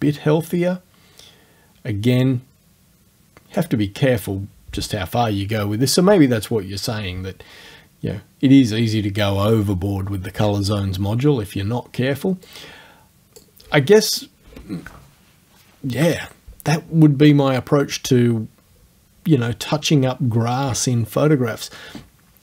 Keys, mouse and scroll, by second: 3.8-12.5 middle drag, 12.5 click.